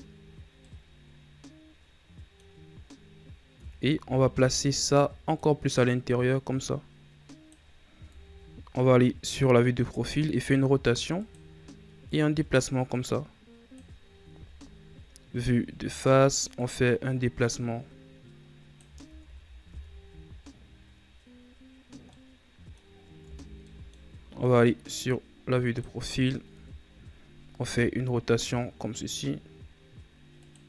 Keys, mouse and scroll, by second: 0.5-2.8 middle drag, 2.8-3.5 scroll up 2, 3.5 Tab, 3.9 a, 4.2 a, 5.3-8.0 drag, 8.0 KP_3, 10.0 r, 12.0-14.2 drag, 14.2 KP_1, 15.5-16.5 scroll up 4, 16.5-18.9 drag, 18.9 ctrl+z, 19.6 Tab, 21.9 scroll up 1, 22.0-23.1 middle drag, 23.1 Tab, 23.5 middle click, 24.5-26.4 drag, 26.4 KP_3, 27.6 r.